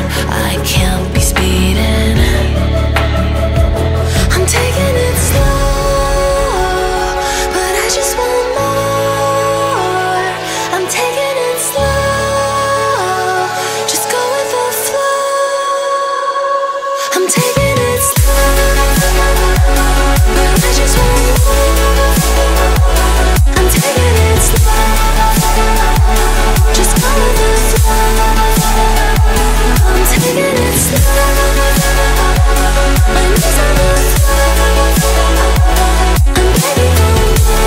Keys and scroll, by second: 16.4 Caps_Lock, 16.7 c, 17.8 Caps_Lock.